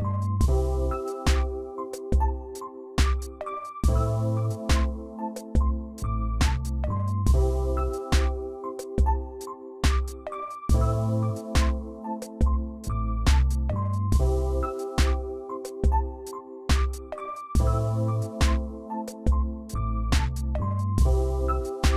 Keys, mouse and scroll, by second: 2.8 9, 6.8 double click, 13.3 click, 13.6 ctrl+d, 16.4 shift+click, 18.0 right click.